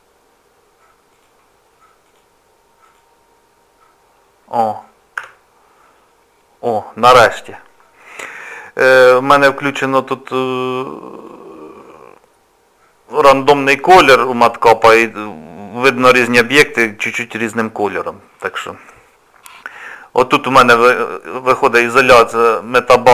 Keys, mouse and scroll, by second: 1.1 click, 2.1 click, 2.9 click, 6.5-7.1 scroll down 1, 7.1-7.5 scroll down 1, 7.7 shift+middle click, 9.6-10.8 scroll down 4, 11.2 click, 20.8 click.